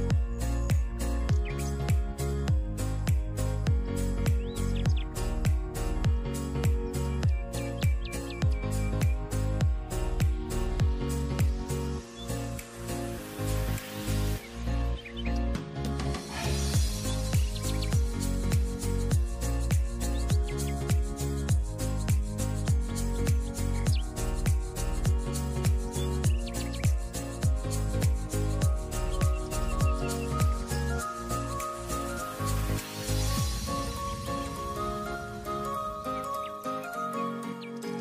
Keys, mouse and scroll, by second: 1.5 click, 2.5 click, 3.6 click, 4.2 click, 5.6 shift+d, 8.4 s, 13.3 click, 14.4 click, 15.2 click, 15.6 click, 16.8-17.3 scroll down 2, 17.3 click, 18.1 s, 20.0 click, 20.7 s, 21.9 click, 22.1-22.5 scroll up 6, 22.5-22.9 scroll down 1, 22.9 click, 23.7 g, 25.2 click, 25.5-26.0 scroll up 1, 26.0 shift+a, 27.6 scroll up 4, 27.8-28.4 scroll down 2, 28.4 s, 29.3-30.1 scroll up 3, 30.1-31.4 right drag, 31.4 ctrl+z, 32.8 click, 33.6 Tab, 33.8 click, 34.4 3, 34.4 click, 35.3 e.